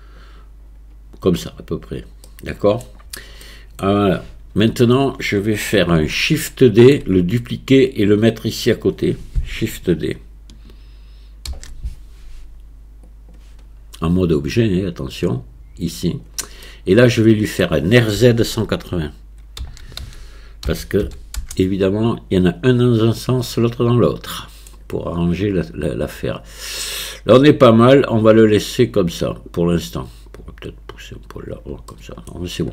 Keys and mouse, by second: 2.3-2.9 drag, 2.3-2.9 middle drag, 2.3-2.9 right drag, 3.5-3.9 drag, 3.5-3.9 middle drag, 3.5-3.9 right drag, 4.7 KP_1, 6.3-7.0 shift+drag, 11.5 shift+d, 14.3-16.3 drag, 16.7-17.7 middle drag, 19.6 r, 23.5-24.7 middle drag, 30.4-31.5 drag, 31.9-32.3 middle drag.